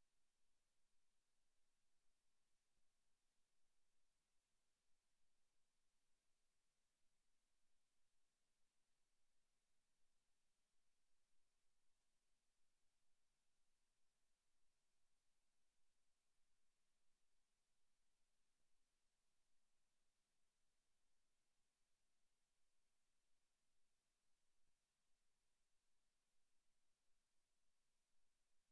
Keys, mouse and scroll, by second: 0.8 s, 3.9 click, 4.2 s, 5.0 click, 5.3 KP_0, 5.9 z, 6.9 click, 8.6 s, 9.3 click, 10.5 right click, 11.5 right click, 12.3 space, 16.9 s, 18.3 click, 18.6 middle click, 19.3-20.0 scroll up 8, 20.0 shift+middle click, 20.5 z, 20.9 shift+middle click, 22.1 click, 22.3 click, 22.5 click, 23.0 click, 24.2 s, 24.8 click, 25.4 click, 26.2 right click, 27.2 click.